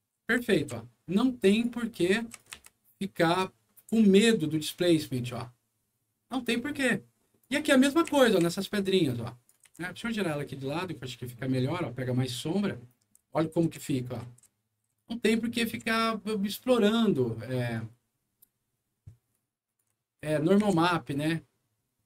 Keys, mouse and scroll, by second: 0.3-1.0 typing, 1.4 click, 1.9 right click, 2.5 r, 3.0-7.3 drag, 7.6-9.4 right drag, 7.9 w, 8.2 q, 9.6 e, 10.3-12.8 drag, 13.0-14.9 right drag, 13.2 a, 13.6 w, 14.2 s, 15.6 w, 16.6-17.7 drag, 18.0 scroll down 2, 18.5 scroll up 2, 19.6 ctrl+click, 20.0 ctrl+click, 20.5 e, 21.0-22.0 drag.